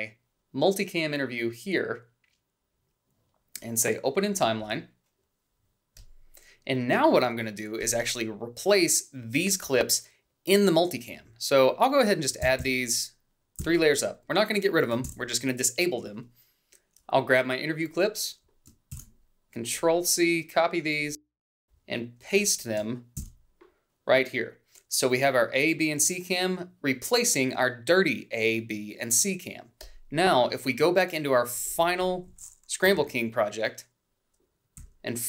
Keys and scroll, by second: 12.3 alt+Up, 13.5 alt+Up, 15.0 ctrl+b, 18.8 ctrl+c, 23.2 ctrl+v, 32.9 =, 34.9 h.